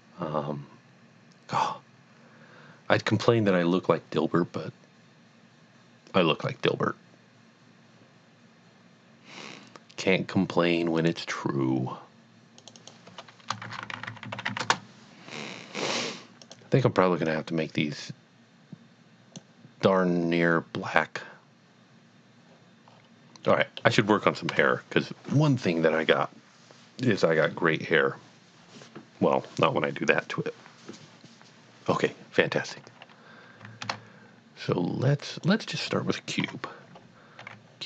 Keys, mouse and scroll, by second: 10.9 Return, 11.0 click, 12.7 double click, 13.7-14.5 typing, 14.6 Return, 16.5 click, 17.3 click, 22.9 click, 23.0 scroll down 1, 23.5 middle click, 24.5 KP_1, 33.6 KP_1, 34.0 a, 35.3 click, 36.4 KP_3, 37.5 g.